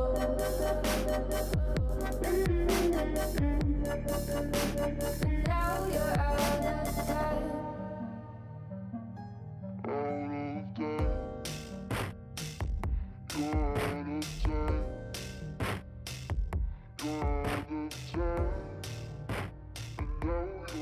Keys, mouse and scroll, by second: 1.6 g, 3.6 s, 5.2 g, 7.2 s, 9.0 KP_3, 9.4-9.9 scroll down 4, 9.9-10.4 shift+middle drag, 10.4 s, 13.3 middle drag, 13.6 alt+z, 13.7 middle click, 13.9-15.1 scroll up 8, 14.1 shift+middle drag, 14.5 shift+middle click, 15.1 s, 17.3-18.1 scroll down 5, 18.1 KP_3, 18.5-19.0 scroll down 4, 18.6 shift+middle click, 19.0-19.9 shift+middle drag, 19.9 shift+d.